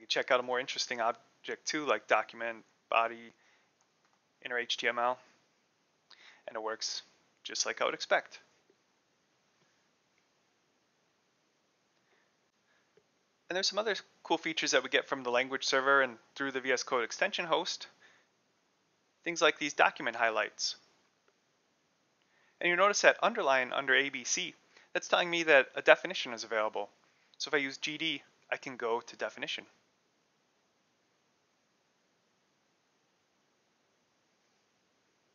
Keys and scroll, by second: 0.0-4.9 typing, 2.7 Return, 5.2 Return, 5.9 ;, 11.1 Escape, 17.7-19.2 typing, 27.6-28.4 typing, 34.1-35.3 typing.